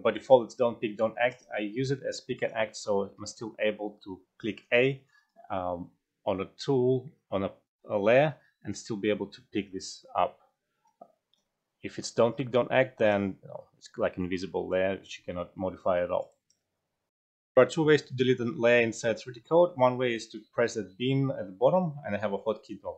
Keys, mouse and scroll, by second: 0.1-1.2 alt+drag, 2.3 click, 3.3 alt+right click, 4.5 a, 5.2 a, 6.3 alt+right click, 6.3 a, 7.1 a, 8.1 a, 8.7 a, 9.8 a, 10.3 a, 10.8 a, 11.3 a, 13.0 click, 14.7-16.2 alt+drag, 15.4 alt+middle click, 15.9 alt+right click, 17.1 F12, 17.1 ctrl+z, 18.5-19.3 typing.